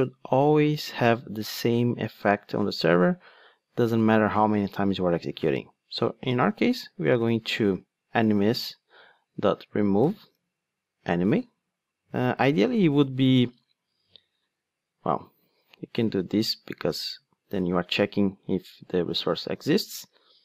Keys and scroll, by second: 8.0 Return, 17.0 super+c, 19.2 super+v.